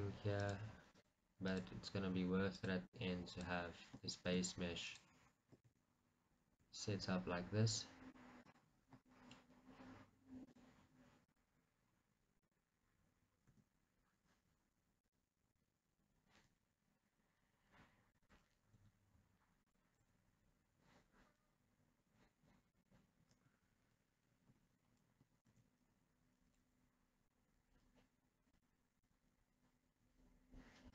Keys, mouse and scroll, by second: 4.5 click, 5.8-9.3 drag, 9.5 s, 10.8-11.8 drag, 11.8 middle click, 11.8-12.5 scroll, 12.5-13.8 drag, 13.8 e, 15.3 right click, 15.6 g, 18.5 click, 19.1 s, 19.9 click, 20.3 g, 23.1 click, 26.6 g, 28.9 right click, 29.4 g.